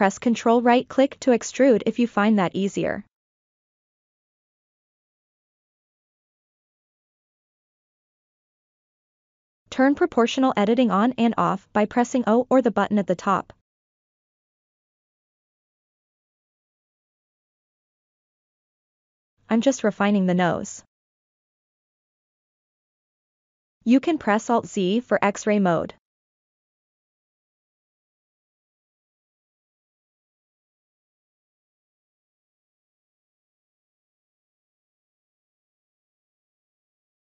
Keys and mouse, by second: 0.1 ctrl+right click, 2.1 ctrl+right click, 6.3 ctrl+KP_Add, 6.9 ctrl+KP_Add, 9.0 click, 9.7 middle click, 10.5 s, 11.0-13.4 drag, 13.6 middle click, 14.1 middle click, 14.4 ctrl+KP_Subtract, 14.5 middle click, 14.8 click, 15.4 middle click, 15.9 click, 16.3 ctrl+z, 16.5 KP_3, 17.9 2, 18.2 g, 18.3 click, 18.8 o, 18.9 click, 19.6 middle click, 19.9 middle click, 20.7 middle click, 20.7 3, 21.0 click, 21.0 s, 21.4 middle click, 21.8 ctrl+z, 22.0 click, 22.5 KP_3, 23.0 g, 23.1 click, 24.2 alt+z, 26.6 click, 26.6 1, 26.7 click, 26.9 click, 27.2 click, 27.7 click, 27.8 click, 28.2 click, 28.5 click, 28.7 r, 28.8 click, 29.1 middle click, 29.5 g, 29.6 click, 30.0 KP_3, 30.8 click, 31.5 click, 31.6 shift+click, 31.8 click, 32.4 click, 32.6 click, 33.0 click, 33.1 click, 33.4 click, 33.6 click, 34.0 alt+z, 34.4 middle click, 35.3 3, 35.4 s, 35.5 click, 35.7 middle click, 35.9 click, 36.3 click, 36.4 middle click, 36.9 KP_3.